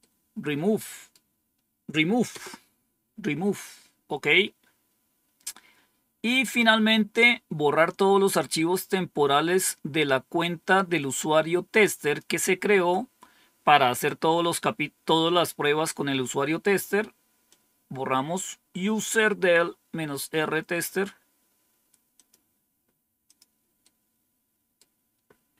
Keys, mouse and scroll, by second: 2.2 Return, 4.6 scroll down 2, 10.5-12.1 drag, 17.4-19.0 drag, 20.0 right click, 22.1 click, 23.2 click, 23.7-24.8 right drag.